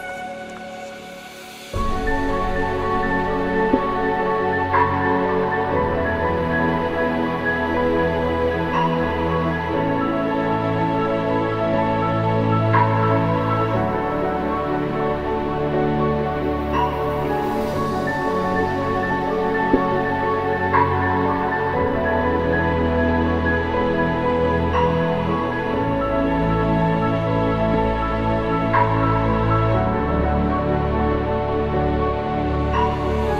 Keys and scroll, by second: 5.1 ctrl+=.